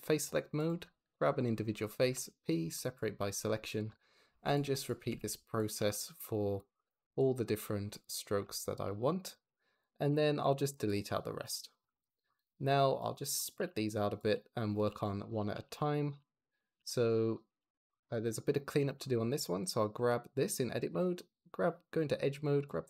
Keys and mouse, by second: 0.4 click, 1.0 click, 1.9 p, 4.2 p, 4.6 click, 4.9 p, 5.4 click, 5.6 p, 6.4 click, 6.7 p, 7.0 click, 8.3 p, 9.2 Tab, 9.9 g, 10.3 Escape, 10.6 x, 11.3 click, 12.2 click, 13.4-17.4 typing, 14.1 click, 14.5 click, 15.2 click, 15.8 click, 16.5 click, 16.8-17.4 drag, 17.8 click, 18.6 Tab, 20.6 2, 22.4 click.